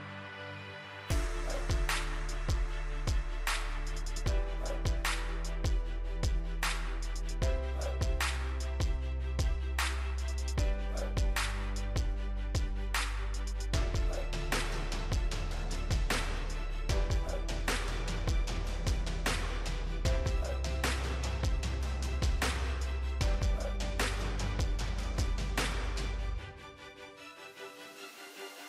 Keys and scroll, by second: 27.0 ctrl+j.